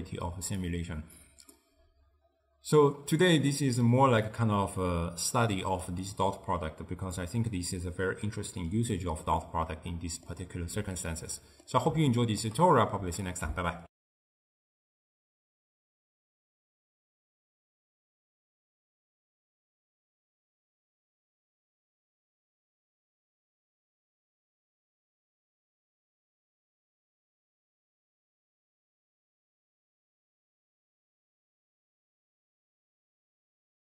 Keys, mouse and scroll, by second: 0.7 click, 1.6-5.9 middle drag, 5.9 click, 10.0-13.9 middle drag, 13.9 ctrl+alt+shift+w.